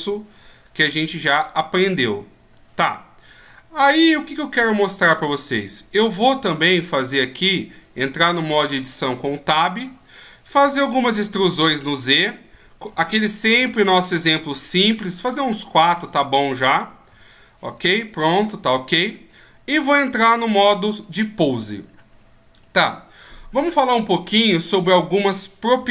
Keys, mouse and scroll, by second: 6.3-7.3 shift+scroll up 2, 7.3-9.2 shift+scroll up 1, 9.2 Tab, 10.5 e, 12.9 e, 15.6-16.1 shift+scroll up 3, 17.8 e, 19.9 click, 21.0 click, 23.1 click, 24.3-25.9 scroll up 1.